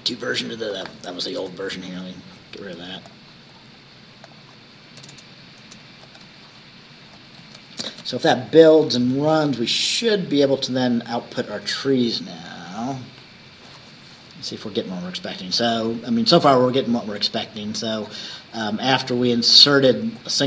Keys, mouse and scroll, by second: 1.5 BackSpace, 3.1 click, 3.6-3.9 scroll up 2, 4.3 click, 5.1 BackSpace, 6.1 ctrl+s, 7.9 ctrl+shift+b, 12.9 click, 15.7-16.7 drag, 17.7-18.0 scroll up 1, 19.6 click.